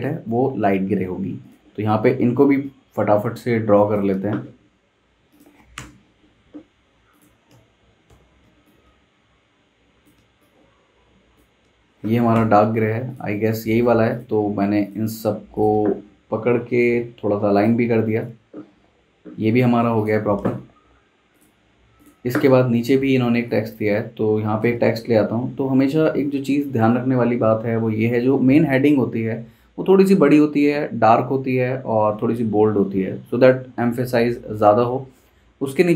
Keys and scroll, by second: 5.7 i, 7.5-8.6 typing, 12.3 i, 18.5 super+g, 25.7 super+z.